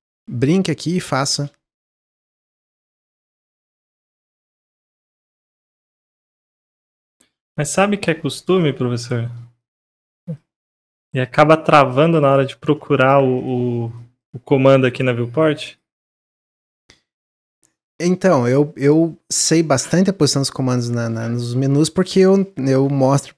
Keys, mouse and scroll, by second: 1.2 alt+click, 1.7 s, 4.6 click, 6.4 alt+click, 6.7 s, 7.6-9.0 drag, 9.6-10.9 drag, 10.9 middle click, 11.2 Tab, 11.4 scroll down 1, 11.9-12.2 drag, 12.7-13.3 middle drag, 13.3-15.7 right drag, 15.7 click, 16.0 drag, 16.3-19.4 middle drag.